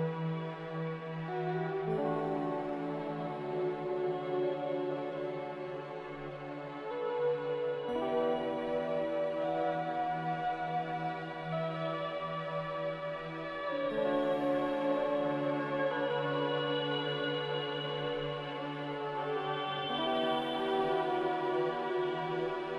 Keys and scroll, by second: 1.6 1, 3.0-3.8 typing, 5.0-6.0 typing, 16.8 q.